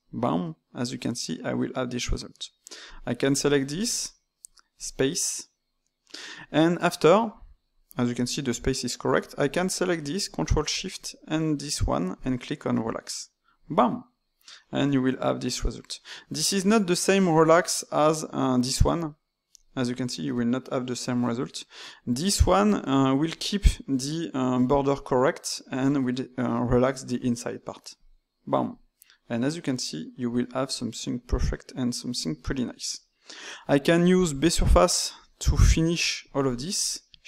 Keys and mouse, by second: 2.9 click, 3.7 ctrl+shift+click, 4.7-7.7 drag, 9.4 click, 10.6 ctrl+shift+click, 12.8-14.6 drag, 14.6-16.1 middle drag, 16.1 ctrl+z, 17.0 right click, 18.9-20.0 right drag, 21.2 ctrl+z, 27.9-29.1 drag, 29.1-33.5 middle drag, 33.5 d, 34.1 d, 34.2-35.6 drag, 35.6-36.1 d, 36.4 alt+click.